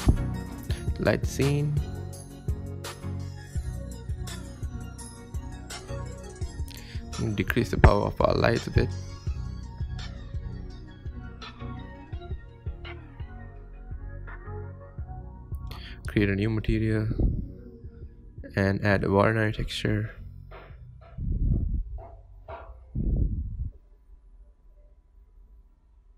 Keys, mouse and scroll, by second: 2.2-2.6 drag, 2.7 click, 4.5 click, 5.4 click, 6.0 KP_0, 6.7 click, 7.2 click, 7.5 KP_0, 8.3 click, 11.1-11.5 scroll down 1, 11.5 scroll up 1, 11.7 shift+middle click, 12.5 click, 12.7 scroll up 1, 12.9 scroll down 3, 13.1 scroll up 1, 13.2 shift+middle click, 13.6 scroll down 1, 13.7 shift+middle click, 14.0 click, 15.0-15.3 scroll up 2, 15.1 shift+middle click, 15.3 click, 15.9 click, 16.1 click, 16.3-16.8 scroll up 6, 16.4 Tab, 17.6 scroll down 1, 17.8 ctrl+KP_Add, 18.0 ctrl+KP_Add, 18.2 ctrl+KP_Add, 18.4 ctrl+KP_Add, 18.8 click, 20.8-21.3 scroll up 5, 21.3 click, 21.7 click, 23.5-25.0 drag, 25.6 scroll down 3, 25.8 shift+middle click, 26.0 click.